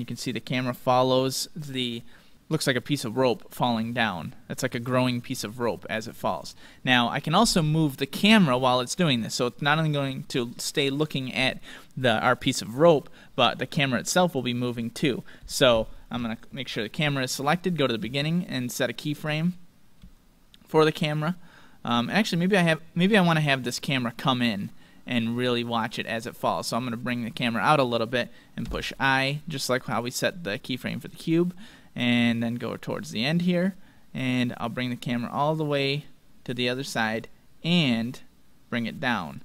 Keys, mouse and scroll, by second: 3.2-6.9 drag, 6.4-8.9 middle drag, 9.5-11.3 drag, 14.3-17.3 middle drag, 17.3-17.7 scroll down 1, 18.3-18.7 scroll down 1, 18.7-21.2 middle drag, 22.2-25.4 middle drag, 24.2-26.2 drag, 28.6 i, 32.4-34.3 drag, 34.5-36.2 drag, 37.8-39.4 drag, 39.2-39.4 middle drag.